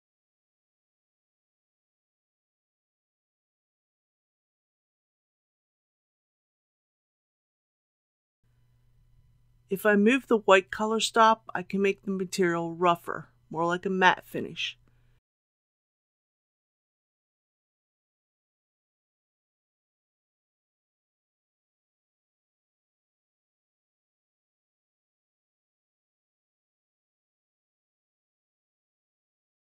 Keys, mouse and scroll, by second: 0.3 click, 0.9 KP_9, 1.2 KP_5, 1.3 KP_0, 3.3 click, 3.9 KP_1, 4.2 KP_0, 10.4-18.7 drag, 19.2 ctrl+z, 21.7-29.6 drag.